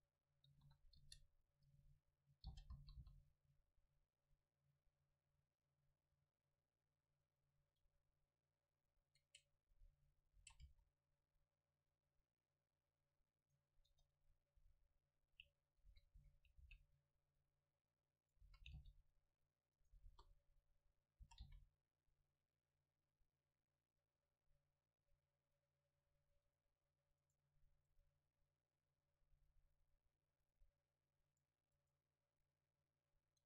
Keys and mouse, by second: 2.5 g, 7.5-9.3 drag, 9.4-11.2 right drag, 10.4 s, 13.6 right click, 14.0 Tab, 14.0 right click, 14.7 a, 16.0 a, 16.3 a, 16.7 c, 18.4-21.7 drag, 18.5 a, 18.8 c, 20.1 KP_0, 21.3 s, 26.6-30.0 drag, 27.5-29.2 right drag, 31.8-33.4 right drag, 32.6-33.4 drag.